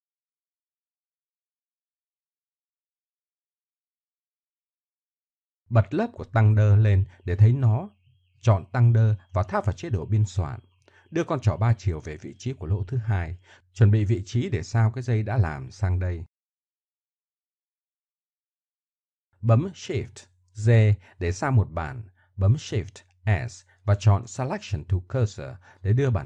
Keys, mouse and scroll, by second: 0.1 Home, 1.1 KP_1, 1.7 click, 2.2 Tab, 5.7-8.9 middle drag, 9.2-14.8 drag, 14.1 Tab, 15.7 Tab, 16.1 shift+s, 19.0 Tab, 19.3-20.1 right drag, 20.1 shift+d, 22.7 shift+s, 25.5-26.2 middle drag.